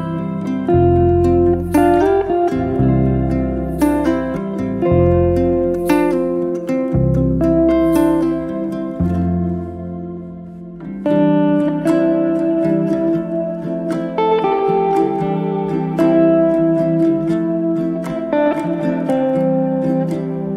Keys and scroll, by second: 6.9 t, 9.5 space.